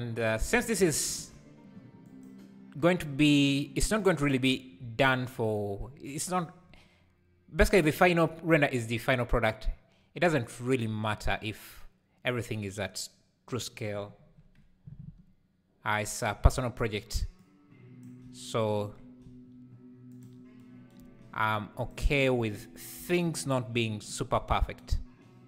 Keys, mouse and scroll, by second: 1.2 alt+a, 2.2 click, 5.5 shift+right click, 7.0 click, 8.0 s, 17.4 click, 19.2 s, 21.2 Tab, 21.7 click, 23.0 ctrl+l.